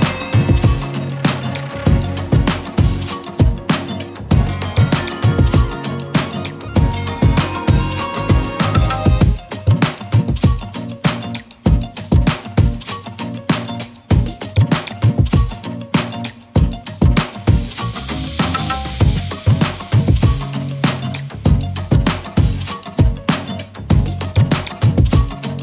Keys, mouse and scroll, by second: 0.0 click, 0.8-7.7 drag, 8.5-9.9 drag, 10.6 click, 11.2-12.3 drag, 12.8 click, 13.1-14.7 right drag, 14.9 click, 15.0 scroll down 1, 15.1 middle drag, 15.3 scroll up 4, 15.5-16.8 shift+middle drag, 17.8 Tab, 18.2-18.5 middle drag, 18.5 click, 18.6 KP_3, 18.8 KP_Decimal, 19.3 KP_Decimal, 19.5-19.8 scroll up 20, 19.8 middle click, 20.2 alt+z, 20.3 scroll down 1, 20.4-21.2 middle drag, 22.1-23.4 alt+shift+drag, 23.4 ctrl+z, 23.5-24.4 alt+shift+drag, 24.4-25.1 middle drag, 25.2 alt+shift+click.